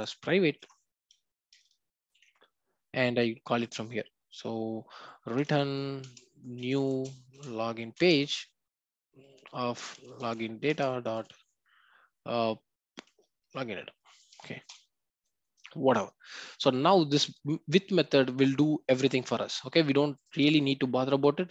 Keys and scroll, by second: 6.0 Return, 10.7 Return.